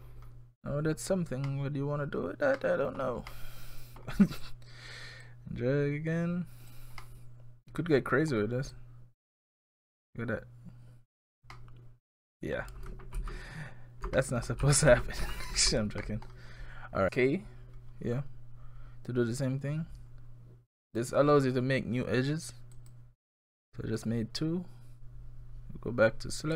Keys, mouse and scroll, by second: 0.1-0.5 scroll down 4, 1.0-1.5 scroll down 2, 1.5 middle click, 2.6 middle click, 4.3 click, 5.2 click, 7.0 middle click, 8.4-8.7 scroll up 1, 8.7 click, 11.4 scroll up 1, 11.5 middle click, 13.2 ctrl+z, 14.2 middle click, 14.5 ctrl+scroll down 1, 14.6 ctrl+z, 14.9 ctrl+z, 15.2 ctrl+z, 16.0 middle click, 20.9 click, 22.8 click, 24.0 right click.